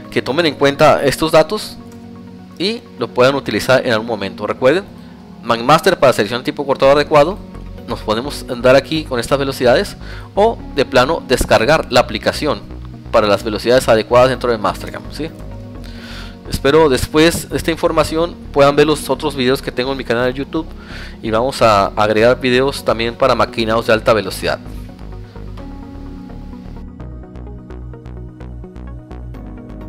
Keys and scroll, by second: 0.7 Tab, 1.4 alt+Tab, 13.7 Tab, 14.2 alt+Tab, 16.5 alt+1, 17.5 alt+7.